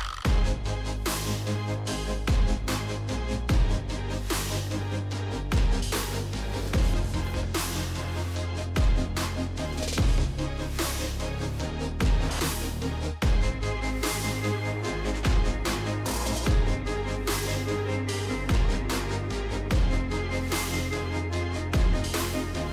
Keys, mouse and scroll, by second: 0.0-2.0 typing, 2.5 Tab, 2.8 Tab, 3.4 Tab, 3.9 Tab, 4.3-8.0 typing, 7.9 click, 8.3 click, 8.8 click, 10.9 click, 13.5 click, 14.6 click, 16.4 click, 16.7 click, 17.9 click, 18.5 click, 19.7 click, 20.5 click, 21.6 click.